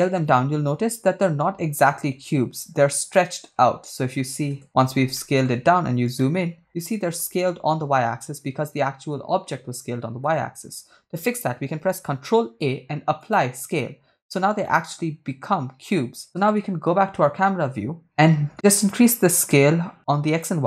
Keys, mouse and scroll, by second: 4.5 KP_0, 5.2 shift+middle drag, 5.6-6.0 scroll up 3, 6.2-7.2 shift+middle drag, 9.0-9.5 scroll down 3, 9.5-10.3 shift+middle drag, 12.0 ctrl+a, 14.7 shift+middle drag, 15.0-15.4 scroll up 3, 16.4 KP_0, 18.8-20.6 shift+drag.